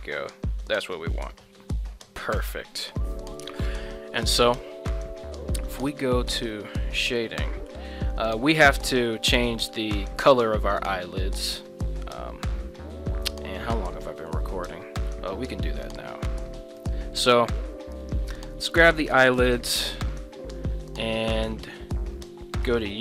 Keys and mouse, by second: 2.4 right click, 3.0 middle drag, 4.2 middle click, 6.1 drag, 7.2-7.7 middle drag, 9.0 right click, 9.4-9.7 middle drag, 12.1 ctrl+Tab, 18.0 right click.